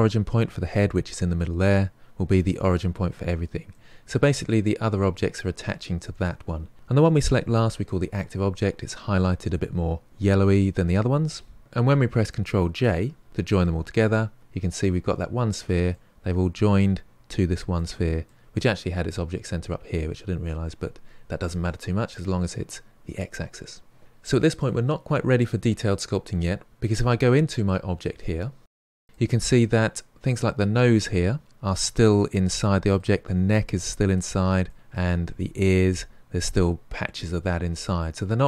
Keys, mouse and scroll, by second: 3.7-6.7 middle drag, 13.2 ctrl+j, 15.9-20.8 middle drag, 26.8-27.8 scroll up 9, 27.8-31.4 middle drag, 31.4-31.9 scroll down 1, 31.9-36.6 middle drag, 36.6-37.4 scroll down 5, 37.4-38.4 middle drag.